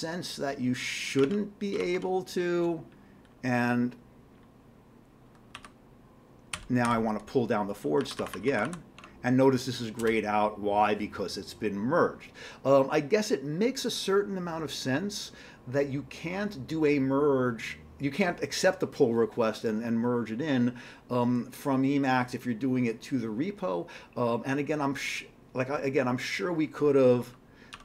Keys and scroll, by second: 1.3 alt+Tab, 1.8 alt+Tab, 5.6 q, 7.8-8.5 typing, 9.0 Tab, 10.0 Return, 27.7 typing.